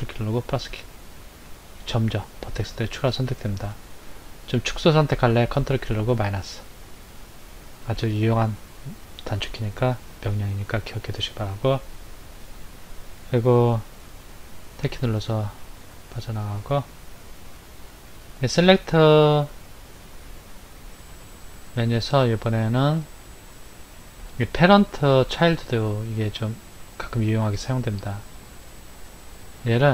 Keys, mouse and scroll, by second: 0.6 ctrl+KP_Add, 1.5 ctrl+KP_Add, 2.5 ctrl+KP_Add, 5.6 ctrl+KP_Subtract, 6.2 ctrl+KP_Subtract, 13.9 Tab, 15.3 scroll down 2, 16.1-16.6 scroll down 2, 16.6 middle click, 18.4 click, 26.8 click, 28.5 middle click, 29.7 click.